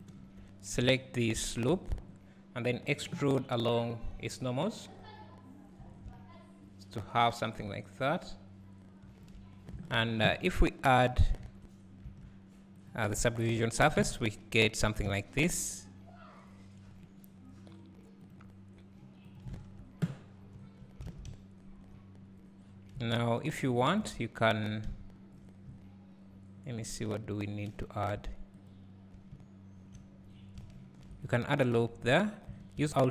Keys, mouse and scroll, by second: 0.2 3, 1.4 alt+click, 3.5-13.2 drag, 3.5-5.4 scroll up 1, 9.8 Tab, 10.3-11.4 scroll down 1, 11.4 Tab, 13.6 `, 15.2 `, 18.2 click, 19.2 click, 19.6 Tab, 20.2 scroll up 1, 20.6 1, 21.1 alt+a, 22.2-24.9 scroll up 1, 24.9 `, 28.7 alt+click, 30.8 ctrl+r, 32.8 alt+s.